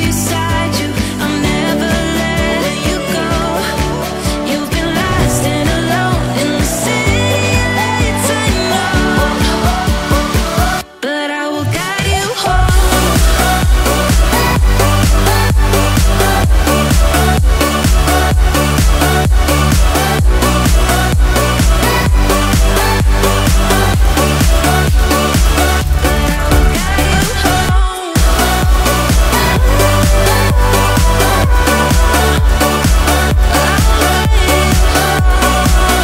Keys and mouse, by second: 0.0-3.4 typing, 1.0 click, 5.1 click, 6.2-10.0 drag, 11.0 click, 12.9-13.3 drag, 14.4 a, 16.5-18.1 drag, 21.0-22.8 drag, 23.3 click, 24.1 click, 24.5 shift+middle click, 25.1 click, 26.4 middle click, 27.0-28.5 drag, 28.8 ctrl+s, 29.1 click, 30.7-32.3 drag, 33.2 click, 33.7-34.5 middle drag, 34.9-36.0 drag.